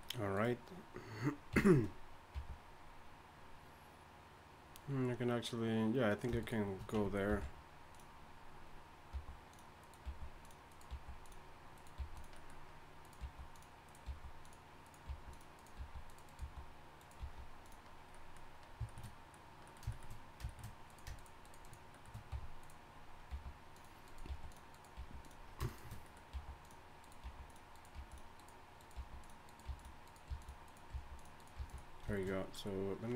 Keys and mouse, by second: 1.2-2.3 drag, 1.5 f, 2.3 g, 6.4 click, 7.3 alt+m, 9.1 g, 10.0 g, 10.9 g, 12.0 g, 13.2 g, 14.0 g, 15.3 g, 15.8 g, 17.2 g, 20.9-22.1 drag, 22.3 f, 23.3 g, 24.3 g, 25.0 g, 26.3-31.6 typing.